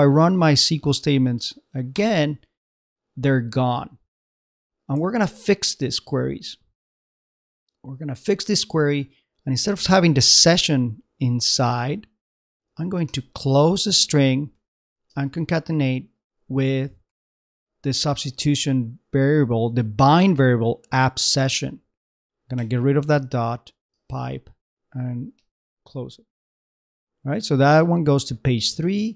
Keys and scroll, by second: 4.5 super+Tab, 13.1 shift+', 14.3 shift+space, 14.5 shift+\, 15.1 shift+space, 15.7 shift+Right, 16.3-18.1 typing, 18.5 shift+Right, 23.2 shift+space, 23.5 shift+\, 23.9 shift+space.